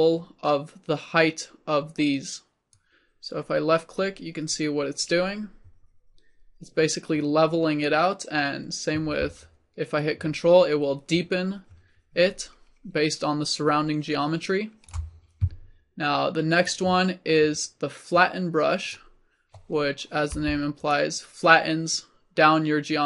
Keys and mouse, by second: 2.8-9.8 drag, 10.1-13.2 drag, 16.6-20.4 drag, 20.4 f, 21.0-23.0 drag.